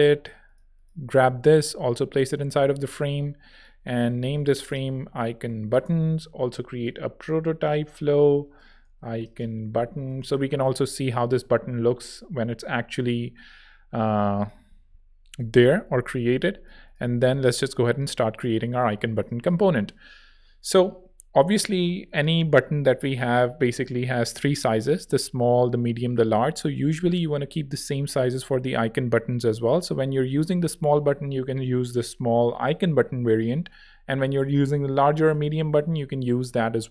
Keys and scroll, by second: 2.6 super+v, 3.8 super+r, 4.1-6.0 typing, 8.6-10.5 typing, 14.9 v, 16.6 z, 18.8 space, 19.2 z.